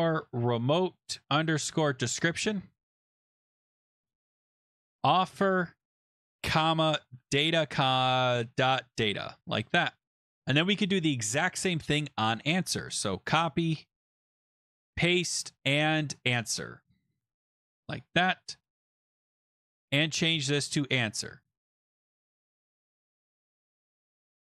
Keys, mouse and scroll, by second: 0.0-10.9 typing, 12.2 shift+click, 13.0 ctrl+c, 13.9 click, 14.3 Return, 14.4 BackSpace, 14.6 BackSpace, 14.8 ctrl+v, 16.3 click, 16.4 click, 16.8 click, 16.8 click, 17.0-18.0 typing, 19.9 click, 20.1 click, 20.9-22.9 typing, 23.4 click, 23.9 Left, 24.0 Return, 24.3 Up, 24.4 Up, 24.4 Return.